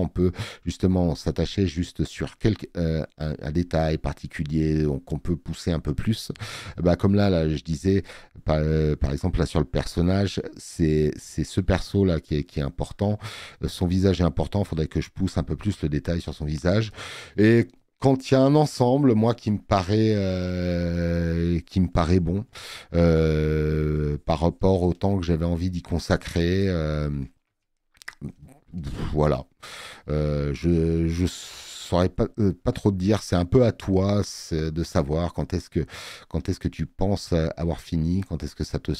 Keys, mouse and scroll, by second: 12.4 click, 12.4 space, 19.8 space, 20.0 click, 34.2 space.